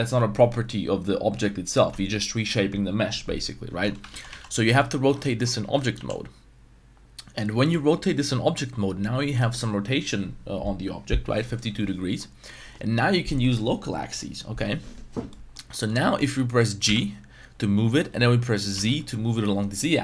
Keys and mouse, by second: 3.7 Tab, 4.1 ctrl+z, 4.3 ctrl+z, 4.5 ctrl+z, 5.0 Tab, 5.2 middle click, 5.6 r, 5.9 y, 12.2 middle click, 15.3 middle click, 15.7 shift+middle click, 16.2 middle click, 16.8 g, 18.7 z.